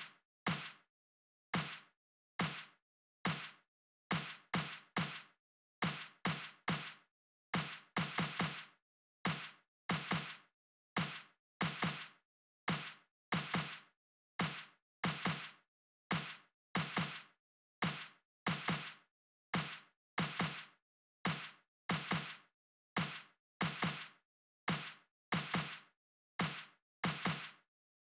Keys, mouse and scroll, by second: 0.0 right click, 1.3 right click, 1.8 click, 2.8 click, 6.0 right click, 6.8 click, 7.3 click, 9.0-14.7 right drag, 17.8 right click, 19.9 click, 20.8-22.1 typing, 23.1-25.1 typing, 27.1 Left.